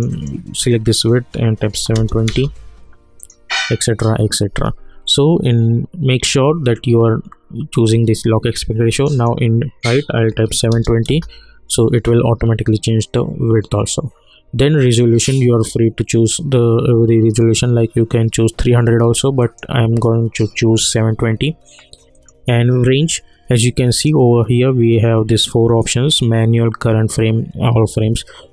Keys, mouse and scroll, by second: 3.2 click, 9.0 click, 11.0 Return, 15.7-18.5 drag, 19.4 click, 22.1 click.